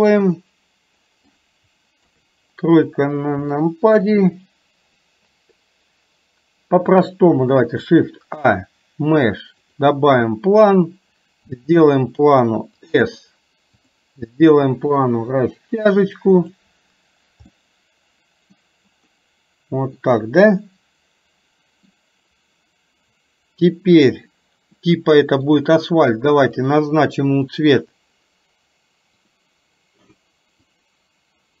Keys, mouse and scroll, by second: 2.1 KP_3, 3.6-4.1 middle drag, 7.9 shift+a, 11.6 s, 13.9 click, 15.1-16.7 drag, 17.5-18.7 middle drag, 20.1 scroll up 2, 20.2-21.2 middle drag, 21.3-22.0 middle drag, 21.3 scroll up 1, 24.9-25.6 middle drag, 26.7 click, 27.5 click.